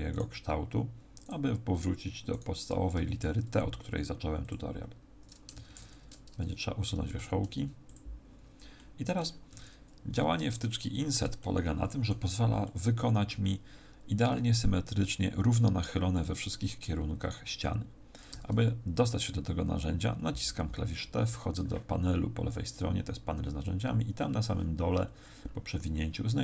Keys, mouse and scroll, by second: 0.1 shift+right click, 2.3 shift+right click, 2.9 x, 5.5 ctrl+z, 7.1 x, 8.7 middle click, 9.5 a, 10.6 shift+middle click, 11.4 middle click, 18.3 t, 24.1-25.1 scroll up 16, 25.1-25.4 scroll down 7, 25.4-26.4 scroll down 7.